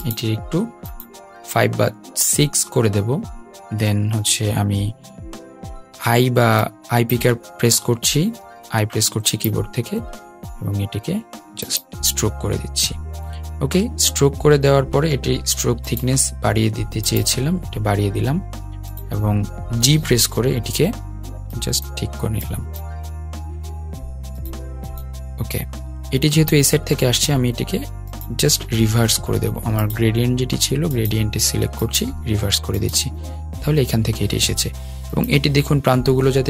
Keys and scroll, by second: 7.7 i.